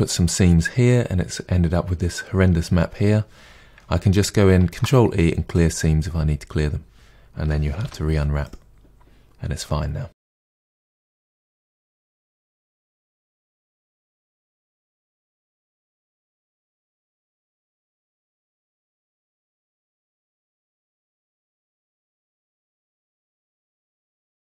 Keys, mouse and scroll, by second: 5.5 ctrl+e, 7.3 a, 8.4 u, 10.3 KP_Divide, 10.5-10.9 scroll down 4, 10.6 middle click, 10.9 shift+middle click, 11.1 Tab, 11.2 click, 11.4 KP_Divide, 11.9 Tab, 12.4 u, 12.7-13.3 middle drag, 13.4 Tab, 13.5 scroll down 2, 13.7 KP_Divide, 13.9-14.5 shift+middle drag, 14.5 click, 14.7 KP_Divide, 14.8 scroll down 1, 14.9 Tab, 15.0 middle drag, 15.3 3, 15.3 click, 15.5 shift+click, 16.1 Delete, 16.3 middle click, 16.6 2, 16.7 alt+click, 16.8 middle click, 17.1 alt+shift+click, 17.1 middle click, 17.4 alt+shift+click, 17.7 middle click, 18.0 alt+shift+click, 18.1 middle click, 18.3 alt+shift+click, 18.4 middle click, 18.7 alt+shift+click, 18.8 alt+shift+click, 18.9-19.3 middle drag, 19.3 alt+shift+click, 19.4 middle click, 19.7 alt+shift+click, 20.2 ctrl+e, 20.3 a, 20.6 u, 21.1 middle click, 21.4 scroll down 1, 21.6 KP_Divide, 21.9 middle click, 22.1 Tab, 22.2 middle click, 22.3 click, 22.4 Tab, 22.6 middle click, 22.9 KP_Divide, 23.1 middle click, 23.7 alt+click, 23.9 ctrl+e, 24.1 middle click, 24.2 a, 24.3 u.